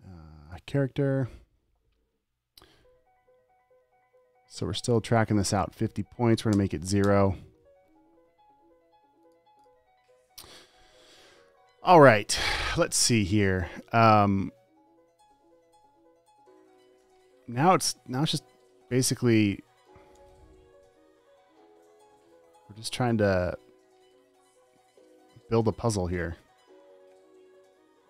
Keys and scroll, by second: 6.8 0, 17.4 super+t, 20.6 v.